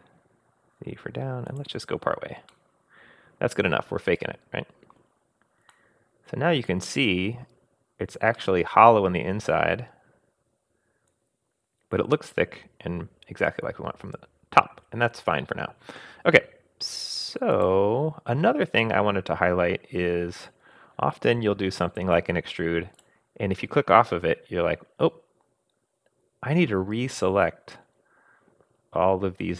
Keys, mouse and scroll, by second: 2.5 scroll down 1, 2.5-5.0 middle drag, 5.7-7.2 middle drag, 5.7 scroll down 1, 7.2 scroll up 2, 8.4 click, 8.5-11.5 middle drag, 14.4 middle click, 17.5 click, 18.8-20.6 middle drag, 21.4 super+z, 22.9 click, 24.5 scroll down 1, 24.9-25.6 scroll up 4.